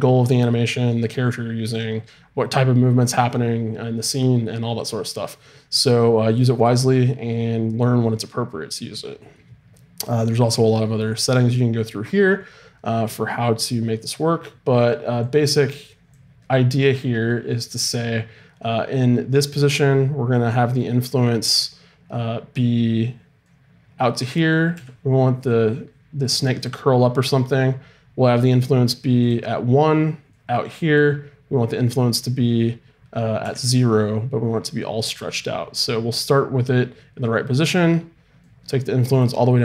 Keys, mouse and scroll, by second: 15.4-20.1 drag, 23.5-25.3 drag, 24.7 g, 28.4-30.3 right drag, 30.3-33.1 drag, 33.1 right click, 33.4 g, 38.4-39.6 drag.